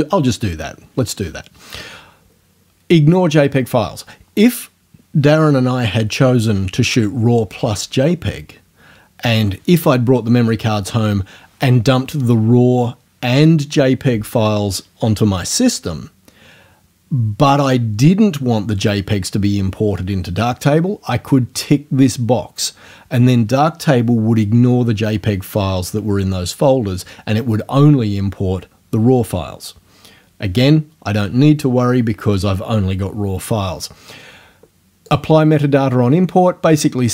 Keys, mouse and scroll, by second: 35.1 click.